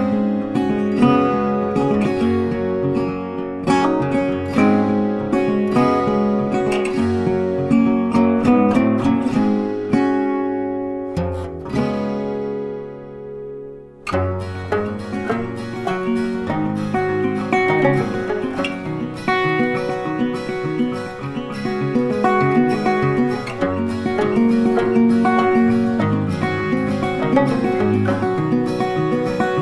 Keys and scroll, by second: 1.0 ctrl+t, 25.8 ctrl+t.